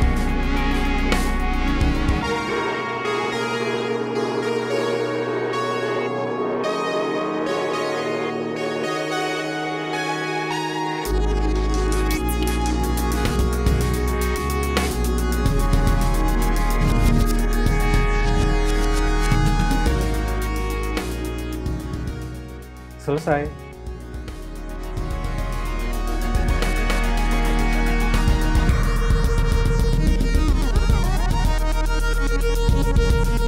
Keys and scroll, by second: 0.3 super+v, 0.7 BackSpace, 1.9 super+z, 2.0 super+z, 3.3-4.2 typing, 5.3 v, 7.4 super+v, 7.7 BackSpace, 8.4 super+z, 8.8 super+z, 9.4-14.9 typing, 16.3-20.1 typing, 17.8 super+z.